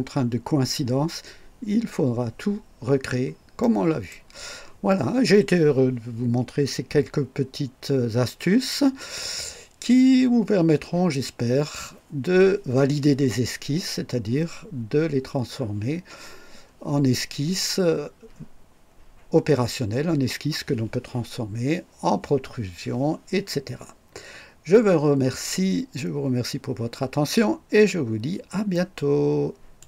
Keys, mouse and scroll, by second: 3.0 scroll down 2, 3.6-4.3 right drag, 28.7 right click, 29.8 click.